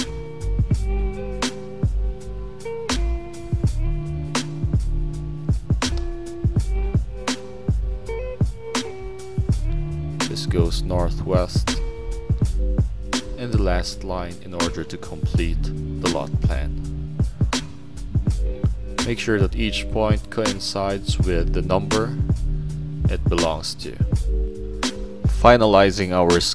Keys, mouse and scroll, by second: 1.2 middle click, 2.3 click, 2.6 click, 6.0-7.1 drag, 9.1-11.7 drag, 14.4 click, 15.8 middle click, 15.8 scroll up 1, 16.4 click, 16.7 click, 17.0 click, 17.4 click, 18.2 click, 18.9 click, 19.3 click, 19.8 click, 21.0 click, 22.1 click, 22.2 click, 22.5 6, 23.3 click, 23.5 click, 23.9 click.